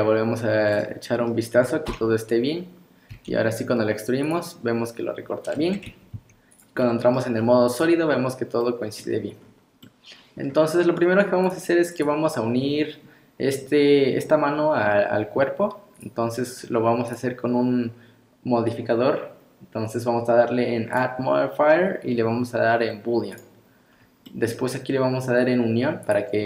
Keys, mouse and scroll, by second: 1.9 KP_1, 3.1 e, 5.5 scroll down 2, 5.9 Tab, 6.1 z, 6.8 middle click, 7.4 scroll down 3, 7.7 click, 8.1 middle click, 9.4 scroll up 2, 9.8 middle click, 11.5 click, 12.0 click, 16.0 click, 17.1 click, 21.0 click, 23.9 scroll up 2, 24.3 middle click, 26.1 click.